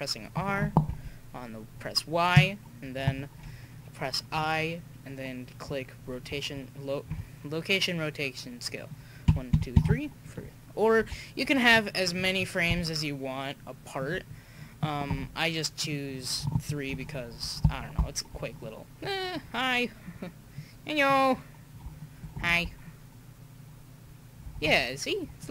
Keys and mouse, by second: 0.9 i, 6.5 Right, 7.1 Left, 9.2 Right, 9.5 Right, 11.0 r, 15.1 i, 17.6-19.7 drag, 20.6-21.4 drag, 22.5 alt+a, 24.7 alt+a.